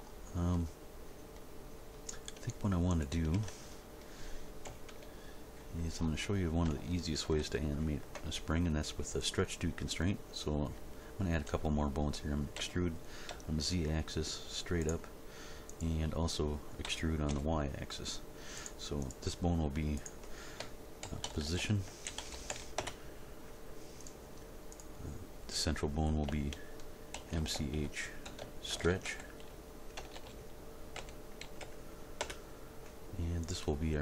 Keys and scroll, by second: 3.3 Tab, 4.6 End, 5.0 Page_Down, 12.5 e, 13.3 z, 16.8 e, 17.3 y, 21.0-22.5 typing, 22.8 Return, 27.1 shift+m, 27.4 shift+c, 27.5 shift+h, 28.7-31.6 typing, 32.2 Return.